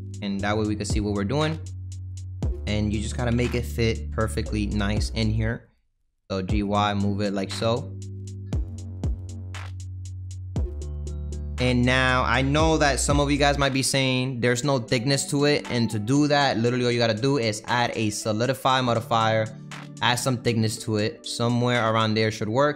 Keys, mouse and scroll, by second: 0.6 g, 1.6-3.3 middle drag, 3.3 KP_1, 4.4 s, 6.1 g, 8.2-9.6 middle drag, 9.6 KP_3, 10.3 g, 11.4-12.8 middle drag, 12.8 g, 14.5-16.1 middle drag, 16.1 click, 18.4-22.3 drag, 22.3-22.7 middle drag.